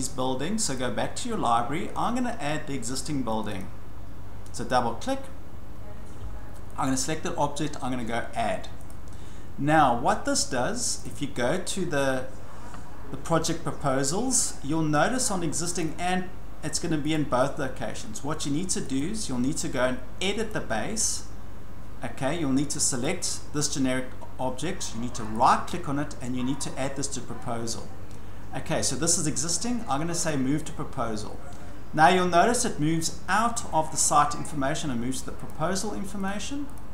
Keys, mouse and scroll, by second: 0.7 click, 3.4 click, 3.6 click, 6.9 click, 8.9 click, 11.0 click, 15.8 click, 17.1 click, 19.0 click, 20.5 click, 23.1 click, 25.3 right click, 30.3 click, 31.4-35.3 drag, 35.5 click, 36.3 click, 36.8 click.